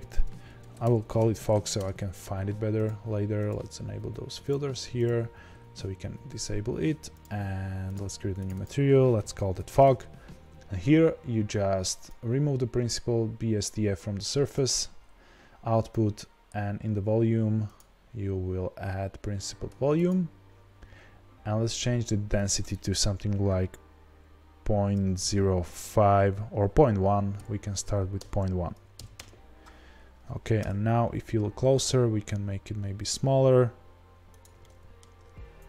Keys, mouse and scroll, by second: 1.8 Return, 8.3 click, 8.5-16.6 drag, 9.8 Return, 20.1-34.4 drag, 29.1 BackSpace, 29.2 KP_Enter, 30.5 KP_0, 31.8 s, 34.5-35.1 middle drag, 35.1 scroll up 1.